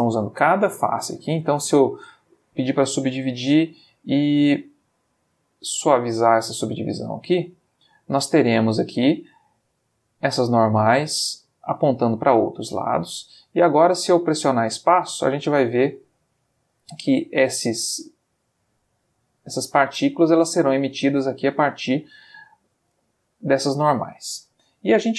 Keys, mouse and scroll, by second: 1.0 right click, 1.8 click, 3.2 click, 5.7-8.3 drag, 8.7-10.8 middle drag, 11.4 middle click, 12.3 middle click, 12.6 middle click, 13.4 Tab, 13.9 space, 17.2-18.9 middle drag, 22.5-23.0 middle drag, 23.1-23.7 ctrl+middle drag, 23.8-24.2 ctrl+middle drag, 25.0 middle click.